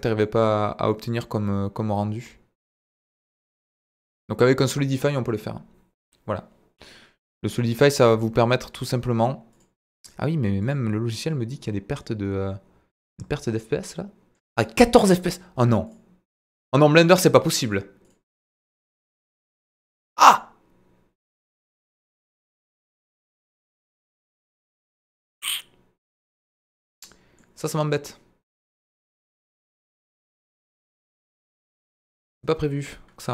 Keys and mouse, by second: 0.3-4.7 middle drag, 11.5-14.9 middle drag, 20.3-27.6 middle drag, 31.6 drag.